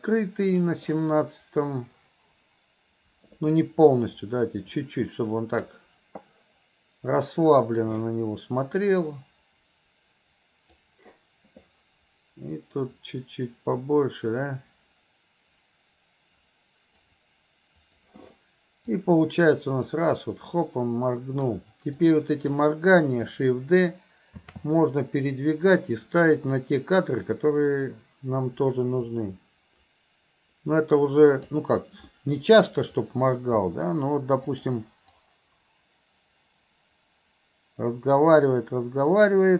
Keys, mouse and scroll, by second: 2.0-5.7 drag, 7.8 click, 8.9-10.9 drag, 12.6-17.0 drag, 17.9 click, 19.1-21.6 drag, 22.0-22.6 drag, 27.1-31.6 drag, 35.2-39.5 drag.